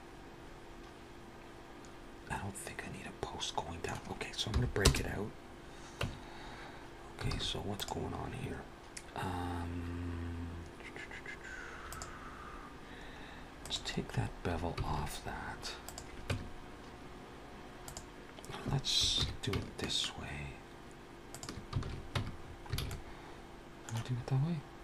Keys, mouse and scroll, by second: 4.4 p, 6.1 Tab, 7.5 alt+a, 7.7 click, 11.8 click, 13.4 click, 14.0 scroll up 2, 15.0 alt+a, 15.7 click, 16.1 Tab, 17.7 click, 19.0 ctrl+b, 21.6 alt+a, 22.1 Tab, 22.2 scroll down 3, 22.6 alt+a, 22.7 middle click, 23.9-24.6 scroll up 3, 24.6 scroll down 2.